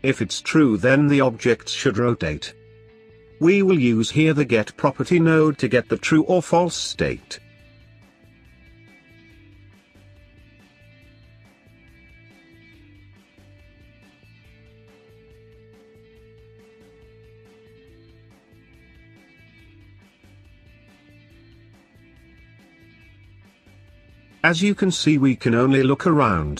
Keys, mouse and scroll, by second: 1.6 shift+a, 7.0-11.7 drag, 11.7-12.7 scroll down 5, 12.7 click, 16.0-19.8 drag.